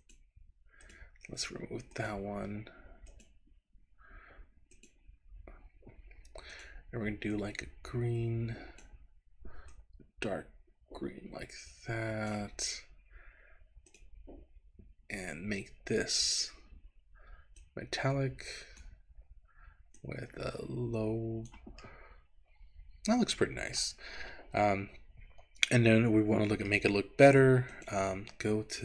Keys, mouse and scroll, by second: 0.9 click, 2.0 click, 3.0 click, 4.7 click, 6.5 click, 13.9 click, 17.6-18.9 drag, 20.0-21.6 drag, 21.9-23.9 middle drag, 24.2 scroll up 3, 26.9 shift+middle click, 27.8 click.